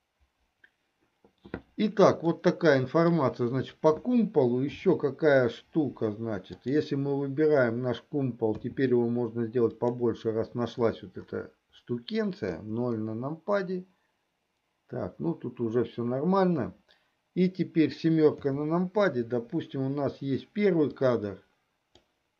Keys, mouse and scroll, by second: 2.4-3.8 middle drag, 5.1 KP_7, 6.6-7.1 drag, 8.6 s, 12.8 KP_0, 18.4 KP_7, 21.1-22.2 drag.